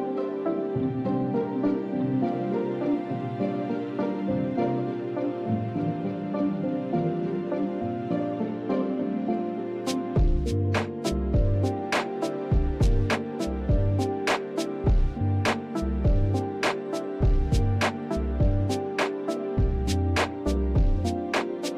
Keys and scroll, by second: 8.0 alt+Tab, 12.7 shift+2, 16.1-17.3 typing, 19.8-21.7 typing.